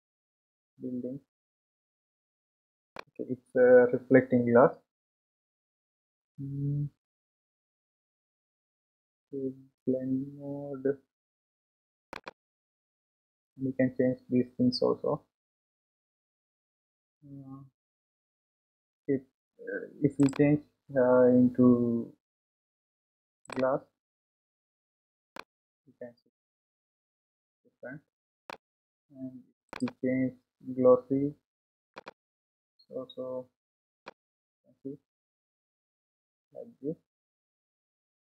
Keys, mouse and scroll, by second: 3.9 scroll up 1, 12.1 click, 15.8 scroll up 3, 25.4-28.5 middle drag, 32.0-33.3 drag, 34.0-37.2 middle drag.